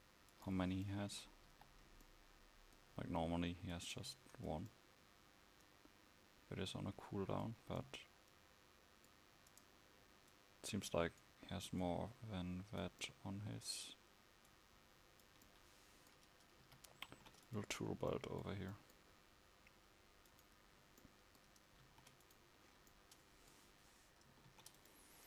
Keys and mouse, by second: 0.7 click, 1.6 KP_5, 16.8 a, 17.2 ctrl+s, 21.9 ctrl+5.